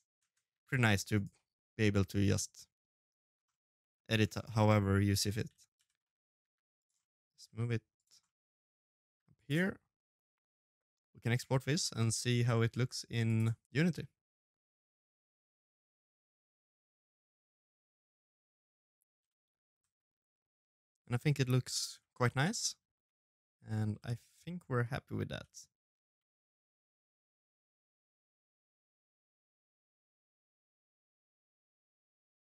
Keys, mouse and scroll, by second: 0.1 g, 1.4 ctrl+z, 1.7 g, 2.5 middle click, 3.6 middle click, 4.3-5.1 scroll down 6, 4.6 middle click, 4.7 middle click, 5.1-5.5 scroll up 5, 5.4 Tab, 5.5 right click, 5.8 Tab, 6.3 right click, 7.0 l, 7.2 middle click, 7.6 g, 8.1 middle click, 8.6 g, 9.4 middle click, 10.2 g, 10.8 middle click, 11.4 middle click, 11.6 scroll down 2, 11.7 shift+middle click, 11.8 shift+middle click, 11.9 middle click, 11.9 shift+middle click, 12.0 middle click, 12.2 right click, 12.2 middle click, 12.4 shift+middle click, 12.5-13.2 scroll down 4, 12.6 middle click, 12.7 middle click, 13.0 middle click, 13.1 middle click, 13.2 Tab, 13.2 scroll up 2, 13.3 click, 13.5 click, 14.2 middle click, 14.9 middle click, 15.0 scroll down 2.